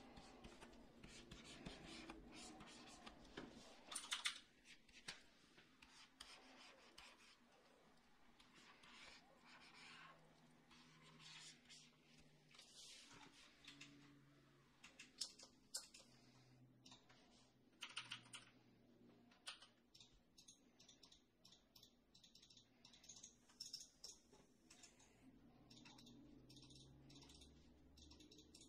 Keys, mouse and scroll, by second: 3.9 [, 4.1 [, 4.2 [, 17.8 ], 17.9 ], 18.1 ], 18.3 ], 19.4 f.